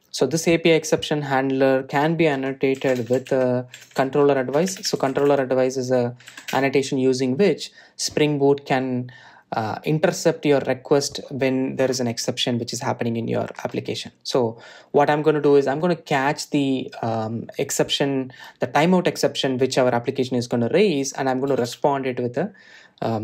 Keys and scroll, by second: 7.7 Return.